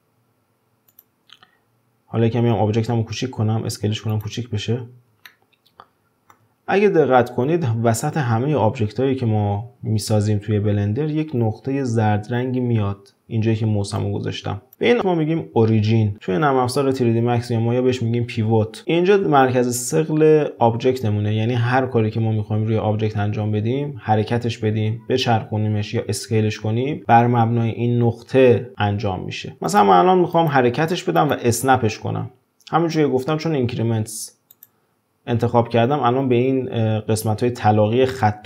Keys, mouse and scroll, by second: 4.5-5.3 scroll up 6, 5.3-8.3 shift+middle drag, 14.0 click, 29.7 click, 30.3 click, 31.2 click, 34.5-37.6 drag.